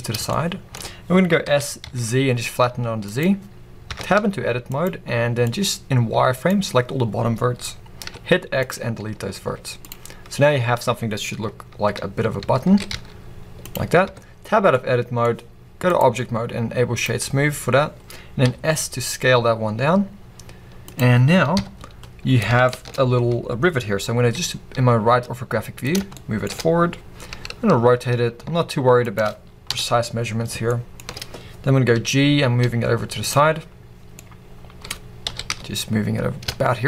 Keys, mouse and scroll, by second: 0.0 click, 0.3-3.2 shift+middle drag, 1.4 s, 3.2 click, 3.9 Tab, 4.2 z, 5.4 click, 8.0 x, 9.5 z, 10.8-11.1 scroll up 1, 12.4 a, 12.7 s, 13.7 click, 14.0 Tab, 14.4 scroll down 1, 14.7-15.9 middle drag, 15.9-20.9 drag, 18.4 s, 22.3 scroll, 22.6-25.9 shift+middle drag, 23.0-23.8 scroll, 24.3 g, 25.9 click, 26.1-28.8 shift+middle drag, 26.9-27.3 scroll, 27.3 r, 31.2-31.8 scroll, 31.9 g, 33.3 click, 33.4-33.9 scroll, 34.2 middle click, 34.9-35.2 scroll, 35.2 g.